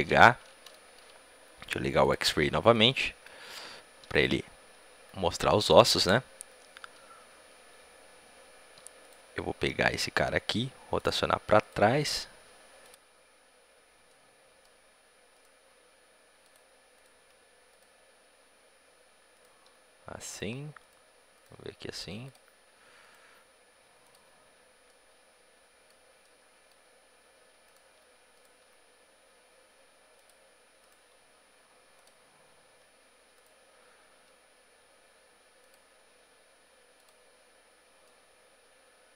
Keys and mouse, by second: 1.9-4.0 drag, 4.0-10.8 right drag, 4.8 g, 9.4 g, 11.4-12.6 drag, 11.4-12.6 right drag, 11.8 g, 12.6-13.9 right drag, 13.9-15.3 drag, 15.3-16.8 right drag, 15.6 g, 17.0 g, 19.3-23.0 right drag, 19.5 g, 21.5 g, 23.2 g, 24.8-26.2 drag, 26.2-27.6 middle drag, 27.6-30.0 right drag, 28.5 g, 30.8-34.0 drag, 30.8-35.5 right drag, 30.9 g, 34.0 g, 36.0-39.1 drag, 36.0 g.